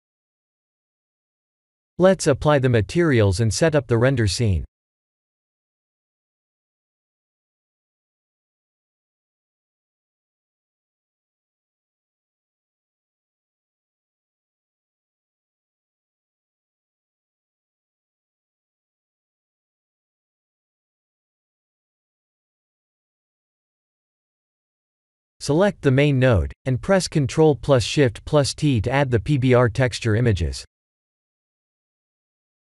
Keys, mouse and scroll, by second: 1.4 shift+middle click, 1.7 middle click, 2.0-2.9 scroll down 2, 4.3 middle click, 6.8 click, 7.8 ctrl+a, 8.5 click, 9.2 ctrl+a, 9.7 click, 10.4 middle click, 10.9 middle click, 11.5 click, 14.7 click, 16.9 click, 18.0 click, 25.4 click, 25.9 ctrl+shift+t.